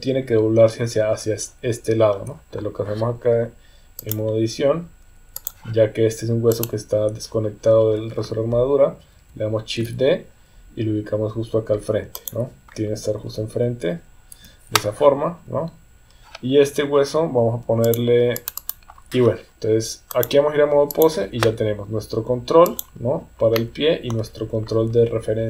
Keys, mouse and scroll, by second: 4.0-5.5 drag, 6.5 click, 9.8 shift+d, 12.7 r, 13.2 KP_1, 14.3 KP_3, 17.8-19.1 drag, 20.2 click, 22.6 click, 23.5 middle click.